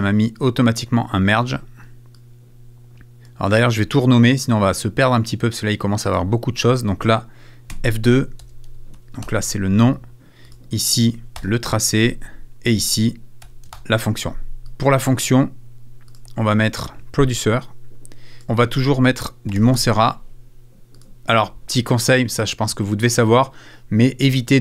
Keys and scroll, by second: 9.4 shift+Return, 11.2 shift+é, 11.4 shift+Return, 12.0 Return, 13.4 F2, 14.5 Return.